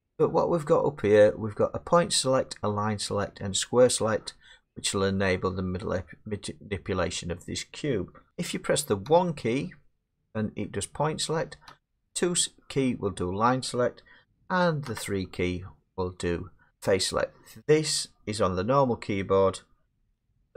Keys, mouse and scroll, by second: 9.1 1, 11.7 2, 14.9 3.